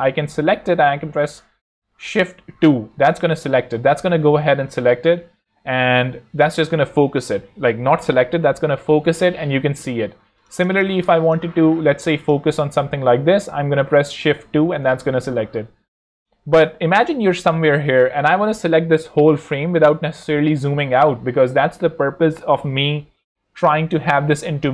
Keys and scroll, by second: 2.4 shift+2, 10.3 alt+z, 11.0 alt+space, 14.2 shift+2, 14.9 shift+super+2, 16.7 shift+super+2, 17.4 shift+2.